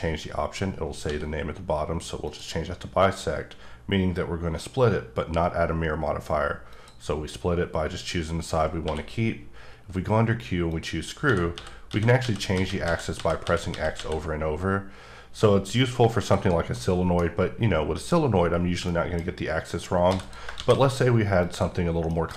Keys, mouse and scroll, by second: 1.0 d, 2.2 click, 6.7 click, 7.5-8.8 scroll up 2, 10.7 click, 11.2-13.9 typing, 16.8 middle click, 18.5-18.9 scroll down 1, 18.9 middle click, 20.0 x, 20.2 click, 20.6 shift+a, 21.4 click, 21.8 scroll down 1, 22.1 middle click.